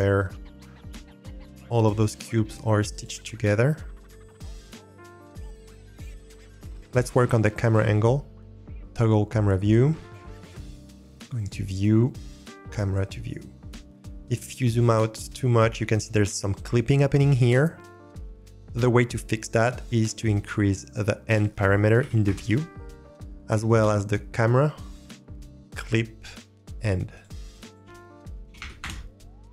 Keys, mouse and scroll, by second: 2.9 click, 4.5 click, 5.4 click, 5.7 middle click, 6.1 middle click, 6.4 scroll down 2, 8.9 click, 11.3 click, 12.6 click, 13.2-13.7 middle drag, 13.9-18.8 scroll down 1, 19.7-22.2 drag, 23.7 click, 25.3-26.7 drag, 27.1-28.8 drag, 28.5 0.